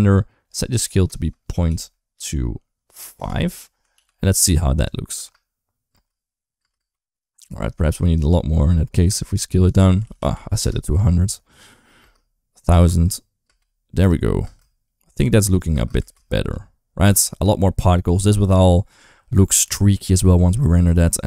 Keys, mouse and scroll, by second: 0.5-3.0 drag, 3.8 ctrl+s, 5.0 space, 5.7 space, 6.4 space, 6.6 space, 9.3-10.4 drag, 10.0 0, 10.1 0, 11.8 space, 12.5 space, 13.3 space, 13.8 click, 14.3 space, 15.3 click, 15.6 space, 15.8 space, 16.3 click, 17.1 ctrl+s.